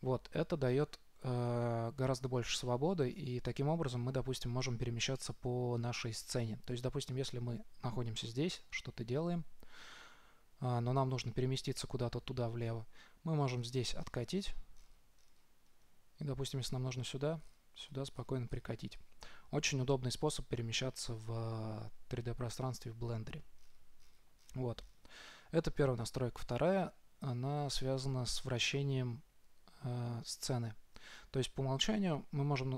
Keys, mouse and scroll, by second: 13.9-20.9 middle drag, 24.4-28.1 middle drag, 28.1 scroll down 1, 28.3-29.8 scroll up 1, 29.8 middle click.